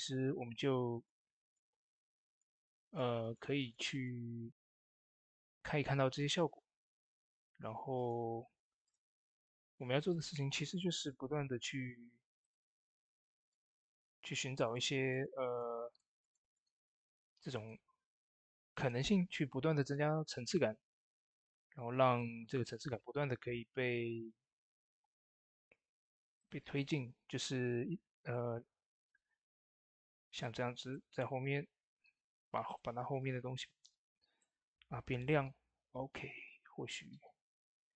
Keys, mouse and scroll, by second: 7.8-12.1 drag, 22.0 click, 23.2 shift+d, 26.2 shift+d, 26.2-36.5 drag, 29.2 click, 30.5 click, 37.7 click, 37.7-37.9 scroll down 1.